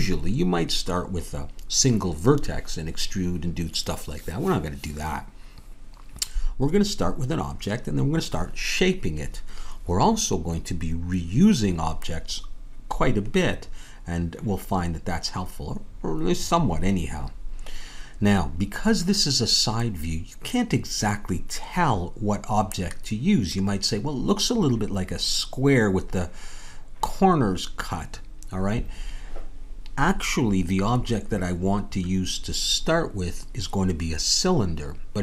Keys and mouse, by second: 19.8-23.1 middle drag.